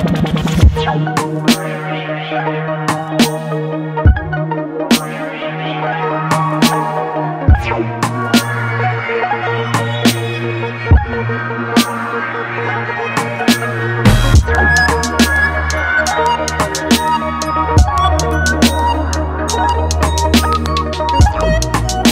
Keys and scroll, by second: 13.5 ctrl+x, 14.9 ctrl+z, 17.3 ctrl+x, 20.2 ctrl+z.